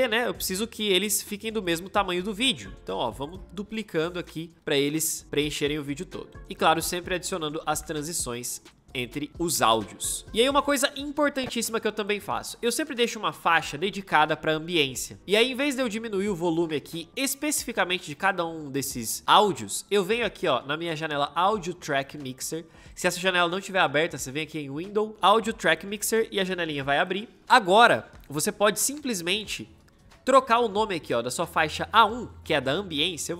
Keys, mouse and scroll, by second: 4.5-6.4 alt+drag, 6.6 ctrl+shift+d, 7.4 ctrl+shift+d, 7.9-9.7 shift+drag.